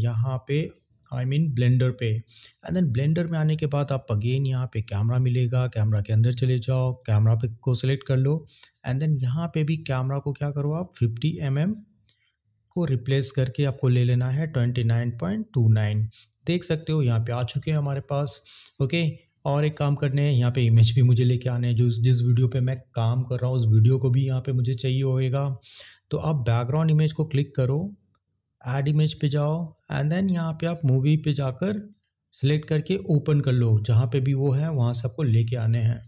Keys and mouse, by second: 4.8 click, 6.0 click, 7.0 click, 11.5-13.3 drag, 27.1 click, 28.7 click, 31.9 click, 36.0 click.